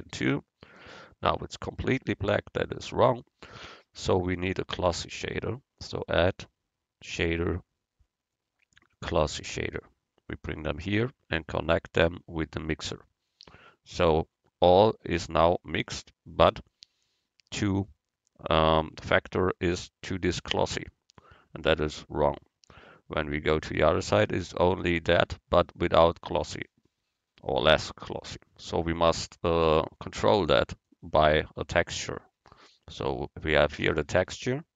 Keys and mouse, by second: 5.9-7.5 drag, 11.4-13.5 drag, 21.4-23.1 drag, 27.7-29.5 drag.